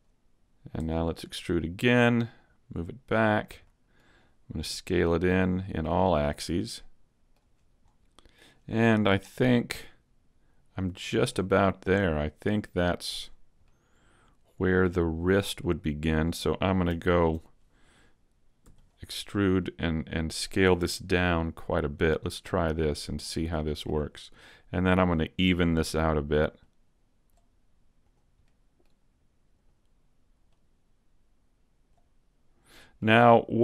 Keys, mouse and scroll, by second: 0.0-0.3 scroll up 3, 0.8 e, 1.2 click, 2.1 click, 3.6 middle click, 4.6 s, 6.1 click, 6.3 middle click, 8.2 scroll down 1, 9.1-9.4 scroll down 1, 11.5-12.3 scroll up 3, 11.9 middle click, 13.2-13.6 scroll down 2, 13.6 middle click, 15.2-15.6 scroll down 2, 15.6 middle click, 17.0 alt+right click, 18.6 e, 19.6 click, 20.8 s, 22.0 click, 22.2 middle click, 23.2-23.6 scroll up 3, 23.6 middle click, 24.0-24.8 scroll up 1, 24.8 right click, 25.1 middle click, 26.6 click, 28.0 right click, 28.4 middle click, 29.6 right click, 30.5 click, 32.6 middle click.